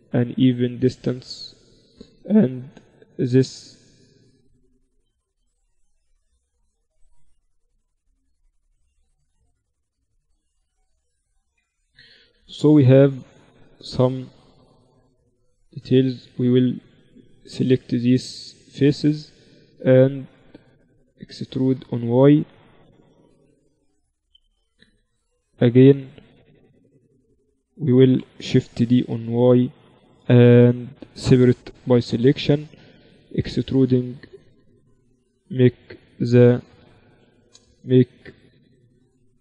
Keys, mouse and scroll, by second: 0.0-2.3 typing, 2.0-3.7 right drag, 3.7 middle click, 5.0 z, 5.4 z, 6.2-8.0 drag, 7.6 z, 8.6 ctrl+r, 11.7 z, 11.8-16.2 middle drag, 13.2 z, 14.3 z, 15.2 z, 16.2-17.9 drag, 16.8-19.2 right drag, 17.9 z, 19.2-20.4 middle drag, 20.8 z, 23.0 e, 28.8 shift+d, 31.8 p, 32.6 Tab, 33.2-34.9 drag, 33.8 Tab, 34.2 Tab, 35.2 ctrl+alt+shift+c, 38.4-39.4 middle drag.